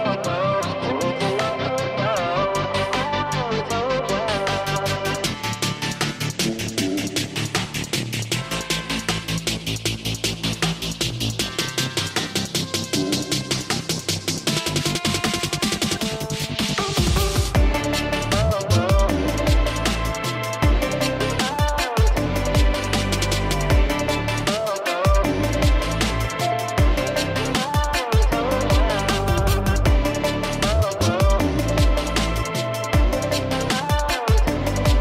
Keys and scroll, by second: 5.4 KP_4, 20.9 ctrl+i.